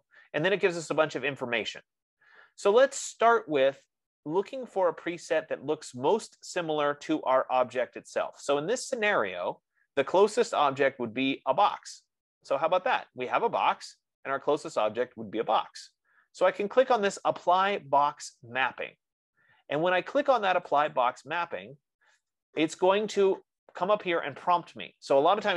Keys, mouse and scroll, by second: 21.3-25.5 drag.